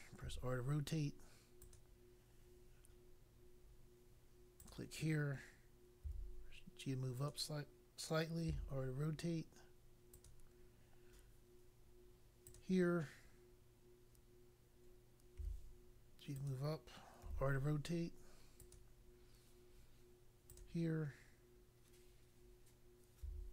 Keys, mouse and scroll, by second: 0.2 r, 1.6 click, 4.6 click, 6.1 g, 7.1 click, 8.5 r, 10.1 click, 12.4 click, 15.3 g, 16.3 click, 17.1 r, 18.5 click, 20.5 click, 23.2 g.